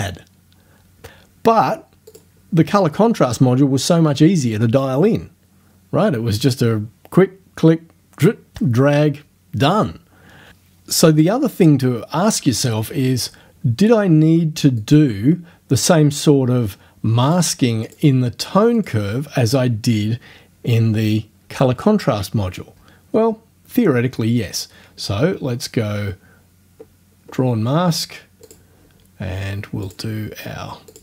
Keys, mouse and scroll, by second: 2.1 click, 14.8 click, 17.3 click, 17.9 click, 18.8 click, 24.5 scroll down 2, 26.3 scroll down 2, 28.5 click, 29.9 click, 30.9 click.